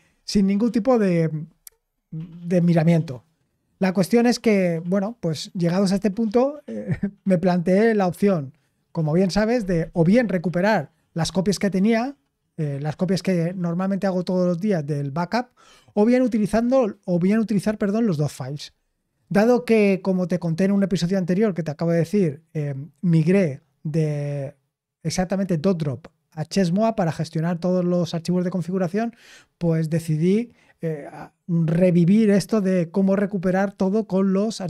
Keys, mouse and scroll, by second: 0.6-6.5 scroll down 1.